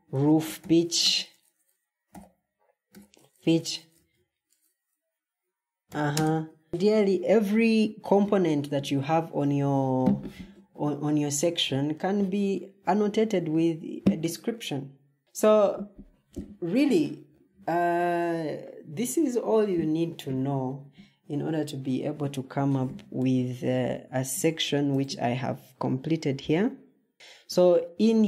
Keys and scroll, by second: 0.0-6.0 typing, 15.2 Escape.